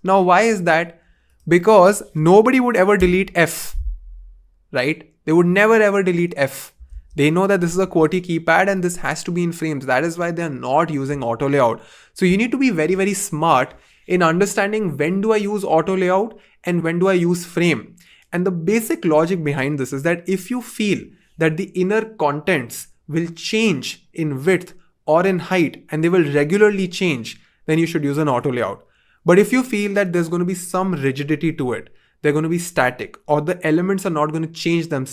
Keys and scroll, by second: 3.0 BackSpace, 7.2 super+z.